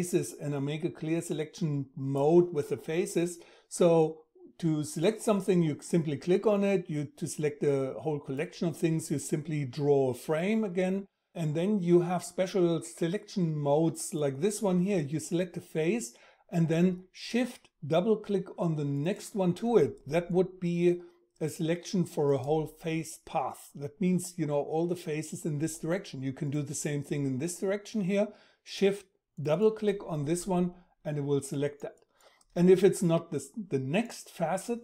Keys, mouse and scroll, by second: 4.4-9.4 drag, 17.1-32.1 shift+drag.